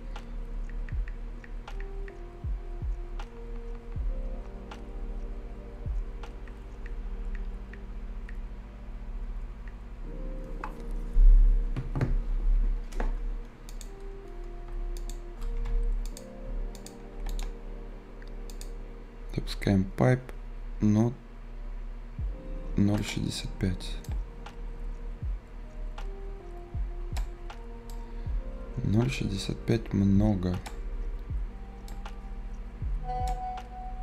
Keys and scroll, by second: 15.6 Escape.